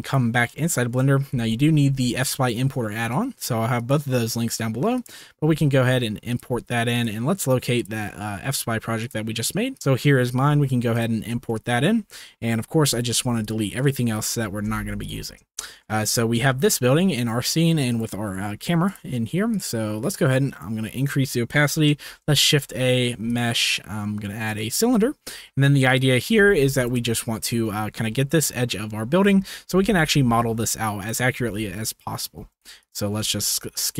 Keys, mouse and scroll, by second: 0.7 shift+middle click, 2.1-5.1 drag, 11.4-12.0 shift+middle drag, 13.4 ctrl+click, 13.7 ctrl+click, 14.6 x, 15.5 shift+middle drag, 16.5-16.9 shift+middle drag, 17.9 click, 18.8 click, 20.4 click, 21.2 shift+middle click, 22.0 shift+a, 25.3 s, 26.2 g, 26.3 z, 26.9-27.5 shift+middle drag, 29.2 g, 29.8 y, 31.3 z, 32.4 s, 33.2 g.